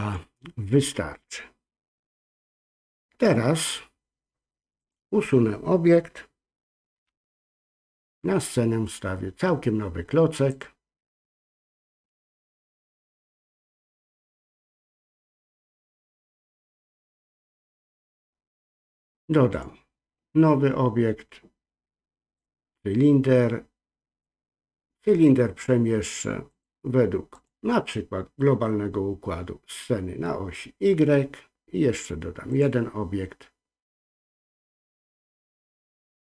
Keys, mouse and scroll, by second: 0.0 click, 4.8 click, 7.0 x, 10.5-12.9 drag, 13.4-15.6 drag, 19.5-22.4 drag, 24.2-25.6 drag, 26.5-28.6 drag, 32.5-36.3 drag.